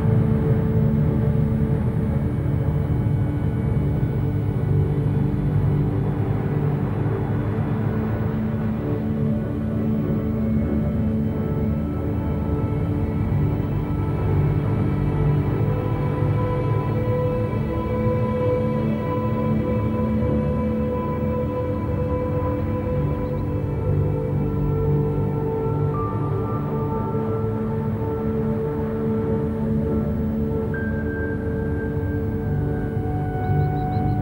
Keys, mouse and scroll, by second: 1.2 q, 2.5 F3, 7.2 Tab, 7.6 Tab, 8.0 click, 8.6 click, 9.3 KP_1, 10.0 scroll up 2, 10.3 shift+middle click, 11.0-11.5 scroll up 7, 11.5 g, 13.0 scroll down 1, 13.5-14.1 middle drag, 14.1 scroll down 1, 14.4-15.2 shift+middle drag, 15.2 KP_1, 15.8 scroll up 2, 16.2-16.7 shift+middle drag, 16.7-17.9 scroll down 2, 17.9 r, 19.0 Tab, 19.3 a, 20.4-21.2 scroll up 2, 21.2 r, 22.6 g, 24.1 r, 25.6 alt+s, 27.5 s, 31.6 r, 33.4 a, 33.8 Tab.